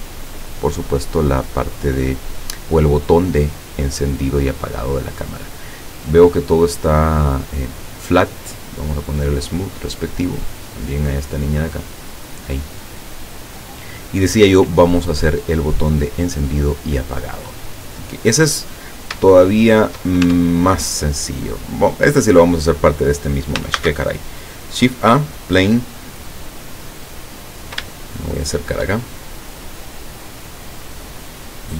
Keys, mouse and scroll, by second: 9.3 click, 10.3 right click, 11.8 click, 18.4-19.0 scroll down 4, 19.3 shift+click, 20.3 shift+Tab, 23.8 shift+a, 25.3 click, 27.4-27.8 scroll up 1, 27.9 shift+middle click, 29.3 shift+middle click, 30.0 scroll up 1, 30.6 scroll down 1.